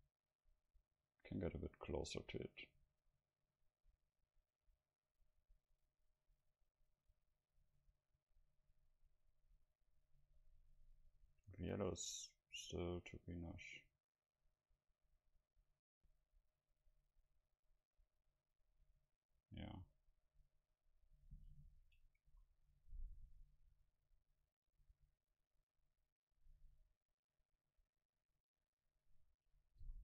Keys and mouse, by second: 10.0-13.2 middle drag, 13.2-14.3 right drag, 14.3-16.6 drag, 20.9-22.0 middle drag, 22.4 a, 29.9 a.